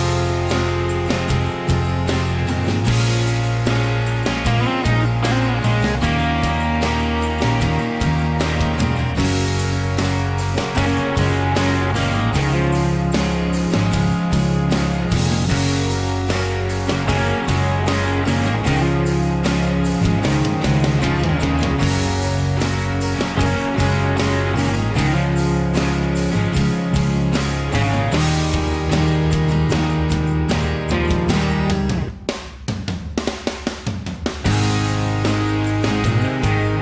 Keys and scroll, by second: 0.1 ctrl+g, 3.3-6.0 typing, 7.7-10.6 typing, 13.7 m, 16.2 p, 18.6 Escape, 18.8 Escape, 35.3-36.8 typing.